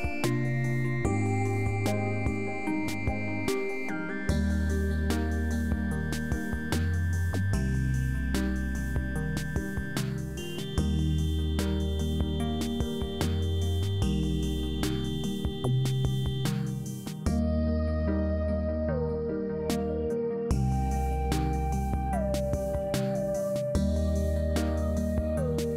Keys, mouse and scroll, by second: 0.6 shift+s, 2.6 shift+s, 4.1 shift+s, 13.9 shift+s, 15.7 shift+s.